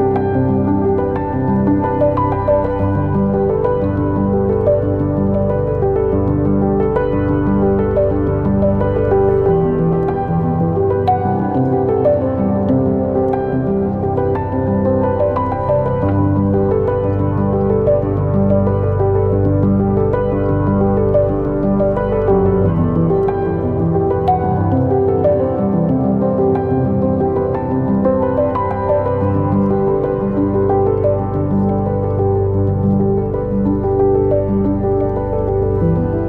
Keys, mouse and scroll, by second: 1.0-6.3 drag, 1.0-1.4 scroll up 2, 1.4 Tab, 3.7-4.1 scroll down 2, 4.1-4.8 scroll up 2, 4.8 Tab, 6.3 scroll up 1, 6.5 scroll down 1, 6.7 scroll up 1, 7.0 scroll down 1, 7.2 scroll up 1, 7.4-7.9 right drag, 7.9 click, 9.7 click, 10.2 click, 11.0-14.5 drag, 14.5-15.5 middle drag, 14.5-15.3 scroll down 2, 15.3 scroll up 1, 15.5 click, 15.7 scroll down 1, 15.9-18.1 middle drag, 16.6 Tab, 16.8 scroll up 1, 16.9 scroll down 1, 17.3 scroll up 1, 18.1 click, 19.2 shift+click, 20.0 g, 21.1 click, 21.2 g, 23.1 Tab, 23.2-23.6 scroll down 1, 23.6 scroll up 1, 23.8 scroll down 1, 24.8 click, 25.2 ctrl+z, 26.4 Tab, 26.6 scroll up 1, 27.1 click, 28.1-28.7 scroll up 1, 28.7-29.1 scroll down 1, 31.3 click, 31.8 KP_0, 32.3-33.1 scroll down 1, 33.1-36.2 middle drag, 33.8 KP_1, 35.3 g.